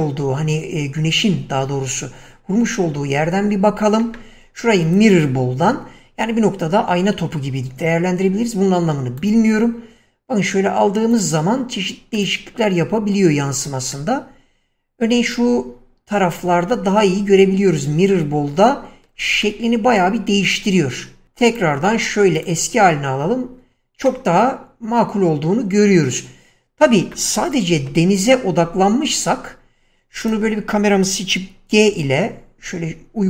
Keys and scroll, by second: 28.2 0, 32.1 g.